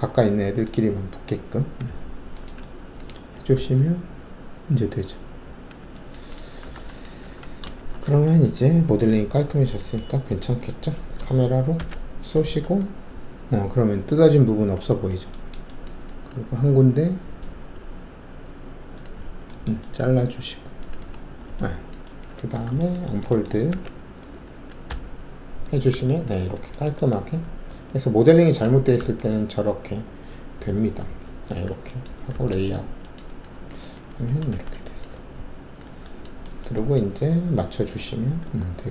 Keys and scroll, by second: 1.6 alt+w, 3.5 alt+3, 5.4 1, 6.6 alt+w, 7.2 alt+`, 7.7 alt+shift+q, 11.7 ctrl+alt+shift+c, 22.5 alt+w, 23.7 alt+4, 24.9 d, 27.6 alt+a, 29.0 c, 31.0 typing, 32.3 alt+z, 33.5 alt+`, 34.5 alt+shift+a, 38.4 shift+2.